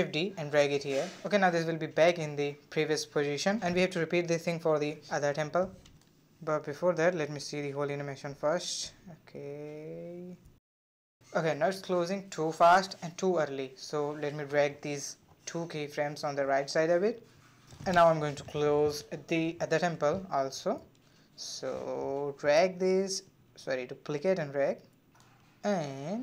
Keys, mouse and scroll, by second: 1.0-1.4 drag, 1.4 space, 2.7 space, 3.2-5.9 drag, 6.3-9.4 drag, 13.0-14.1 drag, 14.4 click, 15.7 click, 17.4 click, 18.0-18.5 middle drag, 18.5 scroll up 2, 20.3 click, 21.3 shift+d, 23.2 click, 23.8 shift+d, 26.0-26.2 drag.